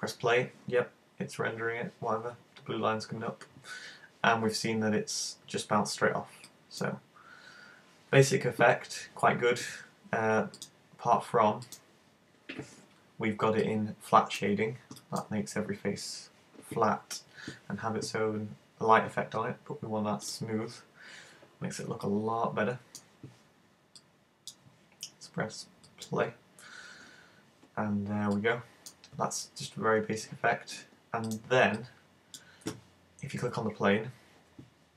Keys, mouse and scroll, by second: 6.6 click, 10.6 click, 11.8 click, 13.2 scroll up 2, 13.6 middle click, 15.0 middle click, 20.3 click, 22.1 middle click, 24.1 click, 25.9 click, 28.0 scroll down 3, 28.4 middle click, 31.3 click, 31.9 click.